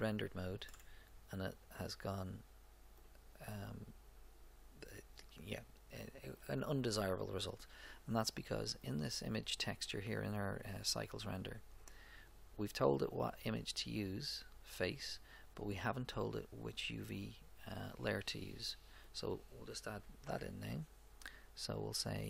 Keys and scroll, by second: 20.2 shift+a.